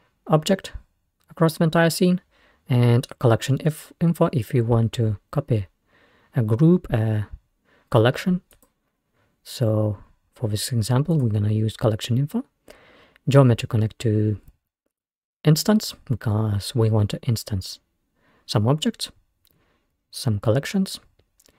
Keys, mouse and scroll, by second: 0.0-2.2 middle drag, 2.6-4.2 middle drag, 5.1 middle click, 6.4 middle click, 8.7 middle click, 9.7-12.2 middle drag, 11.8-12.8 scroll up 2, 13.6-16.5 drag.